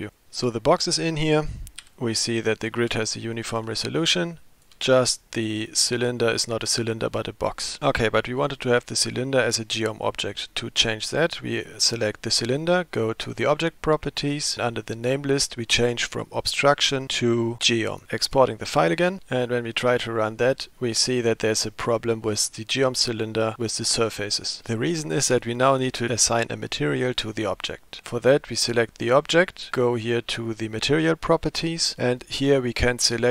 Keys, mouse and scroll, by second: 13.4 click, 14.9-18.0 drag, 18.3-19.2 drag, 28.1 click, 31.8 click.